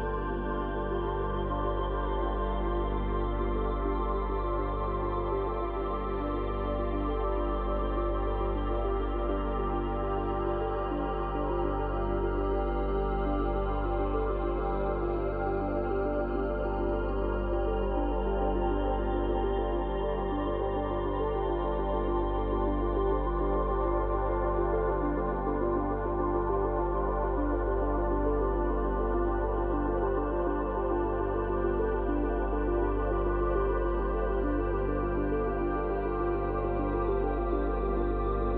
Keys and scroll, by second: 16.2 space, 20.6 space, 38.2 space.